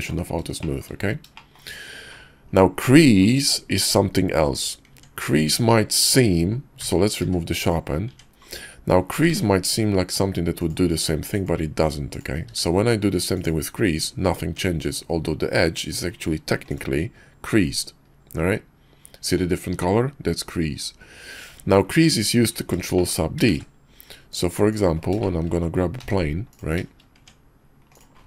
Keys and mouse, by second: 0.6 shift+middle click, 1.3 shift+middle drag, 4.9 Tab, 6.8 a, 7.2 q, 8.1 Tab, 9.3 ctrl+`, 12.5 q, 14.5 Tab, 16.7 click, 21.4 Tab, 22.7 middle click, 22.9 shift+middle click, 23.5 shift+a, 25.2 shift+middle drag, 26.0 g, 27.2 Tab.